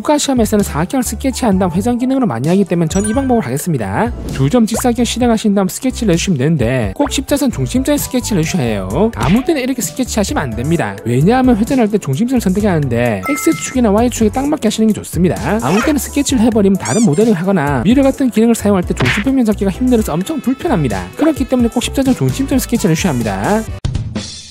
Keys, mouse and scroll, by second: 5.5 click, 7.1 click, 9.7 click, 10.5 click, 11.8 r, 12.6 click, 13.3 click, 14.7 middle click, 16.0-17.6 shift+middle drag, 17.8 middle click, 18.5 middle click.